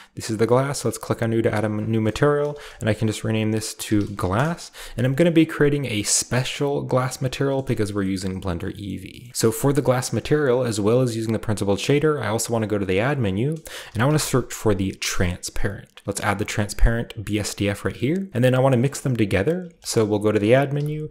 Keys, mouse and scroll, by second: 0.5-2.7 drag, 2.5 g, 3.8-5.3 typing, 4.3 Return, 5.3-5.8 middle drag, 5.7-8.5 drag, 6.0 middle click, 7.8-8.5 shift+middle drag, 7.8-8.5 shift+scroll down 1, 9.0 scroll up 1, 9.3 alt+h, 10.3-10.9 middle drag, 10.3-10.9 scroll down 1, 10.9-14.5 drag, 11.7 shift+a, 13.7-14.0 typing, 16.0 click, 16.4 click, 17.2 click, 17.6-18.6 drag, 17.7-18.6 middle drag, 17.7-19.5 scroll up 1, 18.8 middle click, 18.8-19.5 typing, 20.1 shift+click, 20.7-21.1 typing.